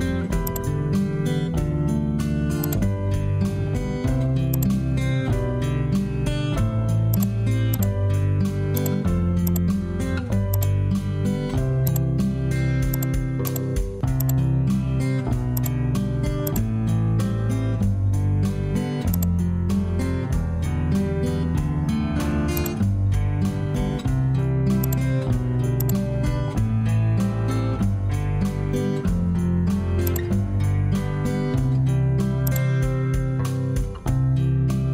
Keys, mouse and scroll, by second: 5.9 ctrl+1, 21.0 Return, 26.5 ctrl+1, 28.0 ctrl+s, 29.3 ctrl+1.